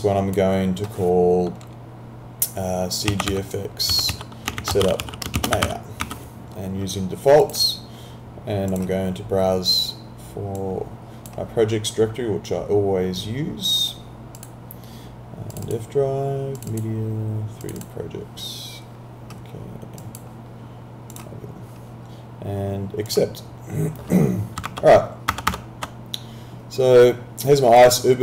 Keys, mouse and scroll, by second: 2.9-6.5 typing, 7.4 click, 14.4 click, 24.7 alt+Tab, 27.8 click.